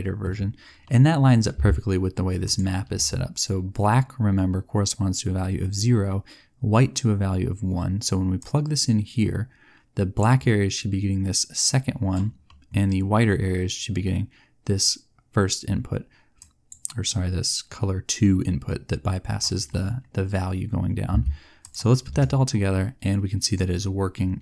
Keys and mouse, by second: 2.3 click, 10.2 click, 21.6 click.